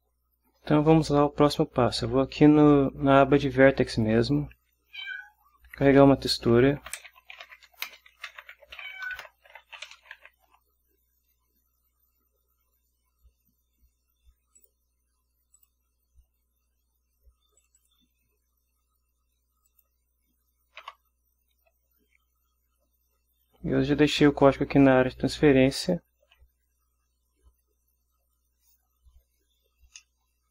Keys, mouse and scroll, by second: 4.0 click, 5.1 Up, 7.0-10.6 typing, 14.7 click, 15.7 click, 17.7 click, 19.8 click, 21.0 Return, 25.8 ctrl+v, 30.1-30.5 drag.